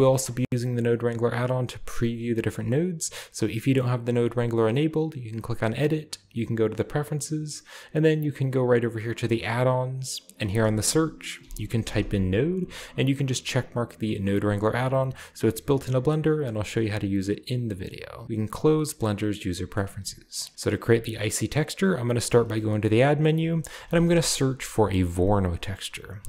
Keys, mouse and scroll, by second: 0.0-0.9 scroll down 1, 0.1-1.7 middle drag, 0.6-1.7 drag, 5.3 click, 6.7 click, 8.2 click, 9.4 click, 10.4 click, 11.4-12.0 typing, 12.6 drag, 14.4 click, 18.7 click, 19.3-20.2 scroll down 2, 19.5 middle click, 19.8 typing, 20.2 click, 22.3 typing, 23.2 click, 23.8 typing, 25.2 middle click, 25.5 click.